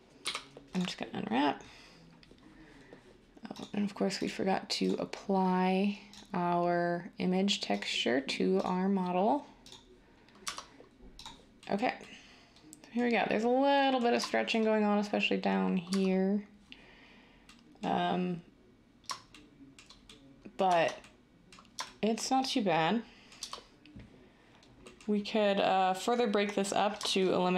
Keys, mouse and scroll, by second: 0.0-0.2 typing, 10.4 Tab, 13.6 Tab, 15.8 Tab, 20.6 Tab, 23.3 Tab.